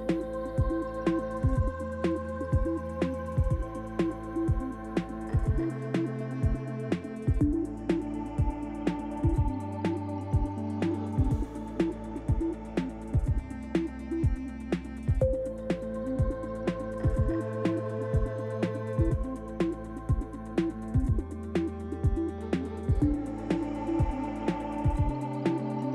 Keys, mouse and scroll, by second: 0.6-1.3 scroll down 1, 5.9 click, 8.0 click, 8.7 click, 10.4 click, 11.6 click, 12.4 click, 15.2 scroll up 1, 16.4 middle click, 19.8 scroll down 2, 21.0 click, 21.0 scroll down 1, 23.7 click.